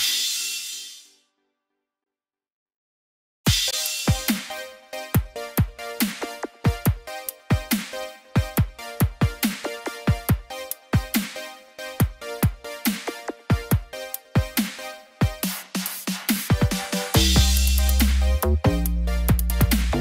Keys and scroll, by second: 9.2 ctrl+=.